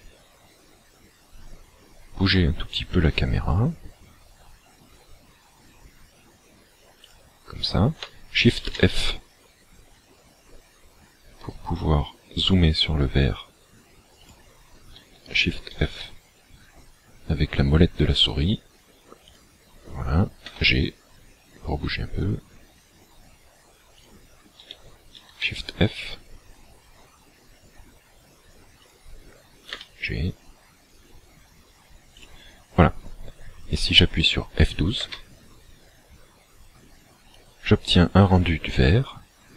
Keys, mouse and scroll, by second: 2.9 g, 7.1 click, 8.5 shift+f, 14.3 click, 15.7 shift+f, 19.3 click, 20.5 g, 24.0 click, 25.1 shift+f, 28.9 click, 29.7 g, 32.1 click, 35.5 F12.